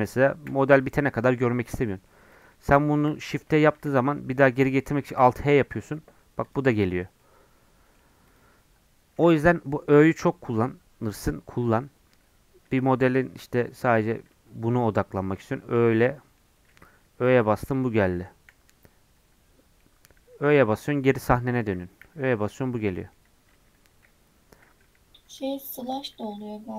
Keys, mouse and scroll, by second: 0.5 h, 1.5 scroll down 2, 1.7 middle click, 2.3-3.4 drag, 3.4 shift+h, 5.1 alt+h, 5.9 middle click, 6.4 click, 6.7 click, 7.2-8.3 middle drag, 8.3-11.0 drag, 11.0-12.6 middle drag, 12.6 /, 13.0 middle click, 13.4 scroll down 6, 13.5 middle click, 13.8 scroll up 1, 14.3 Tab, 14.7 Tab, 14.9 Tab, 15.1 3, 15.4 click, 15.7 middle click, 16.6 scroll down 1, 18.5 /, 19.2 /, 19.8 middle click, 20.2 /, 22.0 /, 22.9 middle click, 23.2 scroll down 4, 23.5 Tab, 25.2 ., 26.4-26.7 middle drag.